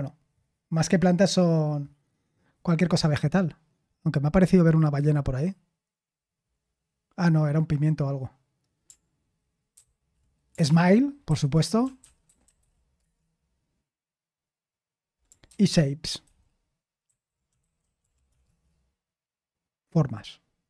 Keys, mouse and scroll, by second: 11.3 ctrl+w, 11.6-13.1 typing, 15.5 ctrl+c, 17.0 ctrl+p, 18.4 ctrl+w.